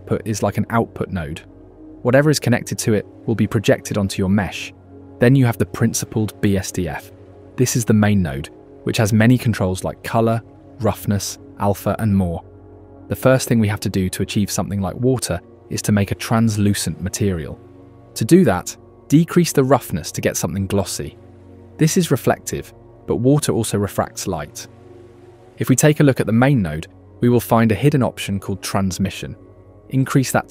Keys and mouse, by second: 2.4 click, 2.6 click, 6.7 click, 6.9 click, 17.2 click, 19.5 click, 20.0 middle click, 20.5 click, 22.5 middle click, 22.5 click, 22.7-23.1 middle drag, 23.9 click, 23.9 middle click, 24.1 middle click, 24.1 click, 24.3 middle click, 24.3 click, 25.0 middle click, 25.6 click, 26.3 click, 28.5 click.